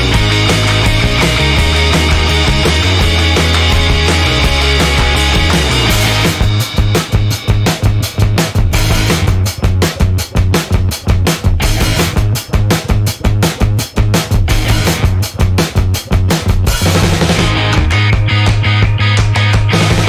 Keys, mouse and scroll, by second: 3.0-3.7 scroll down 4, 4.1 scroll down 2, 4.4 scroll up 2, 6.8 click, 7.9 click, 8.4 click, 9.3 click, 9.8 space, 10.0 space, 11.1 click, 11.4 space, 11.9 click, 12.1 space, 12.5 click, 13.7 click, 14.3 space, 16.6 click, 17.8 click, 19.3 1.